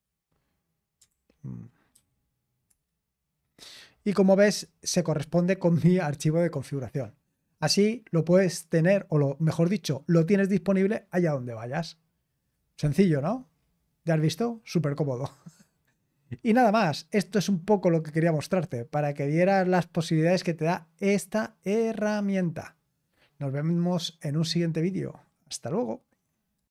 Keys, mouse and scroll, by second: 0.0-3.1 typing, 7.7-8.4 typing, 26.5 click.